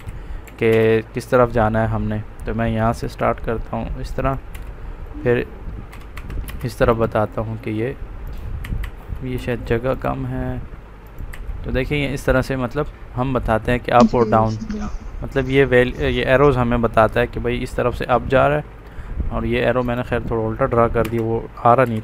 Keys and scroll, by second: 0.6 space, 4.4 space, 5.8 Escape, 6.4 space, 8.5 Escape, 9.3 space, 11.2 Escape, 20.9 Delete, 21.7 space.